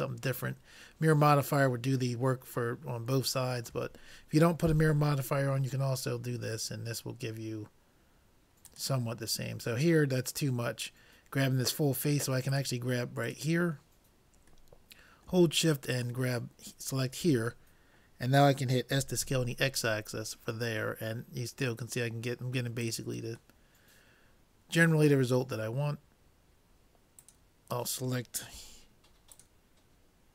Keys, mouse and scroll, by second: 2.3-4.2 middle drag, 3.8 s, 12.5-15.2 drag, 14.8-16.0 middle drag, 16.0-17.6 drag, 17.6 middle click, 19.0 s, 23.6-25.4 middle drag, 27.6-28.9 drag, 29.4-30.3 drag.